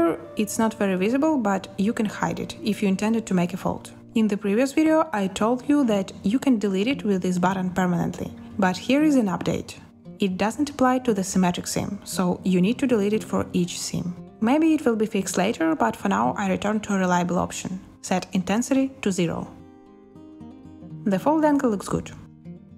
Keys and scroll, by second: 2.4 b, 15.3 0, 15.9 Return, 18.5 z.